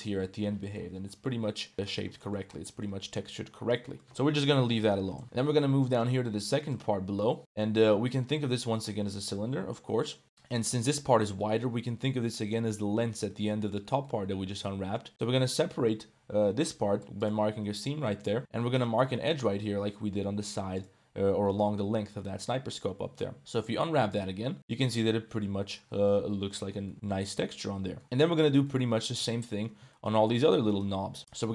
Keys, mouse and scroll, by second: 0.6 middle click, 1.1 middle click, 1.6 middle drag, 4.0 Tab, 4.1 g, 5.2 Tab, 5.2 KP_Decimal, 5.4 Tab, 5.4 middle click, 6.2 1, 6.6 alt+middle click, 7.4-8.7 middle drag, 8.9 middle click, 10.2 middle click, 10.6 shift+middle click, 11.3 middle click, 13.3 middle click, 14.0 middle click, 15.1 middle click, 16.3 u, 17.8 middle click, 18.4 2, 18.7 click, 19.0 middle click, 19.6 u, 22.2 middle click, 23.4 a, 23.4 u, 24.7 Tab, 24.9-25.8 middle drag, 26.1-26.7 middle drag, 26.6 click, 28.0 click, 28.5 click, 29.5 Tab, 29.5 click, 30.3 2, 30.6 alt+click, 31.2 middle click.